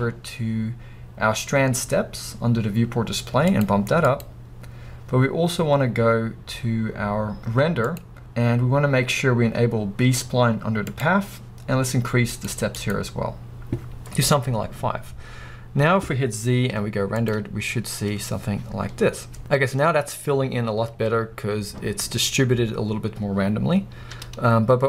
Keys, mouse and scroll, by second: 15.0-24.8 drag, 15.0-15.8 scroll up 2, 15.8-16.4 scroll down 2, 16.4-17.3 scroll down 1, 17.3 scroll down 1, 17.5 z, 24.7 z.